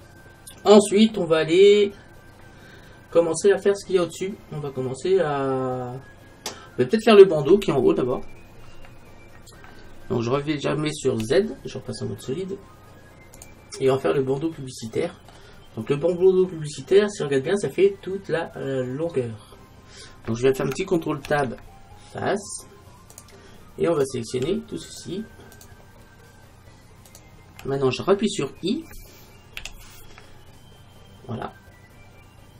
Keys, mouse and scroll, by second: 1.5 middle click, 2.1-4.8 middle drag, 9.2 middle click, 11.3 z, 14.5-16.0 middle drag, 21.3 ctrl+Tab, 24.0-29.0 right drag.